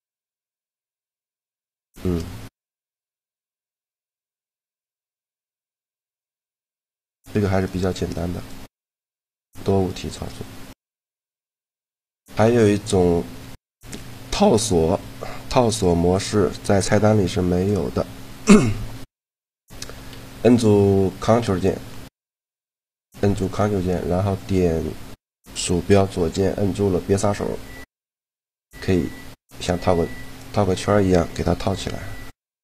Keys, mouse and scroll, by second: 2.1-3.8 middle drag, 3.8-5.5 right drag, 5.5-7.0 middle drag, 7.4-11.5 right drag, 12.1 a, 18.1-19.1 drag, 19.1 right click, 19.3-20.3 middle drag, 20.8-22.6 middle drag, 26.1-27.9 drag, 31.0-32.2 middle drag, 32.1-32.6 drag, 32.1 right click.